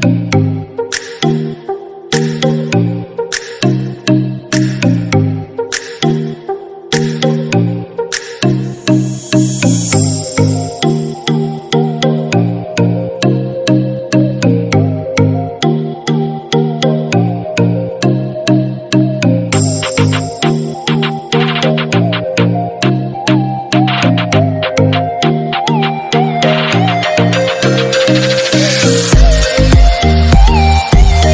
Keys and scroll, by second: 23.7 ctrl+=.